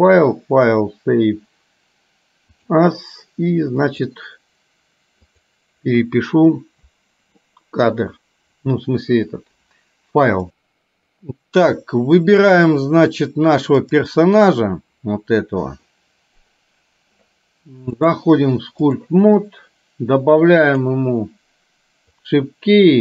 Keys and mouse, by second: 12.6 click, 13.9 click, 18.2-19.3 drag, 20.9 click, 22.4 click.